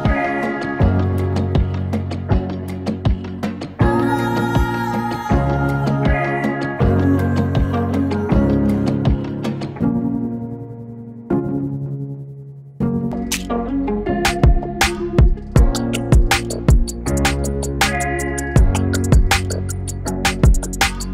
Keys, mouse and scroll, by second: 0.2 click, 2.0 click, 5.0-8.2 drag, 9.3-21.1 drag.